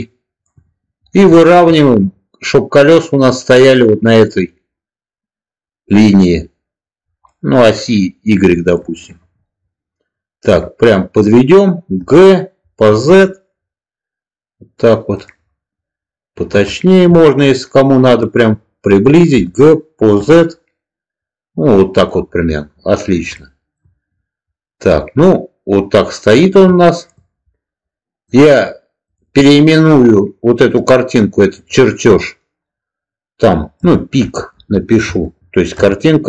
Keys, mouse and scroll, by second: 1.3 shift+middle click, 7.1-8.6 middle drag, 11.9 g, 12.8 z, 15.0 click, 16.7 shift+middle click, 19.2 g, 20.1 z, 21.8 click, 23.4 shift+middle drag, 26.8 shift+middle click, 28.2 click, 29.1-36.2 drag.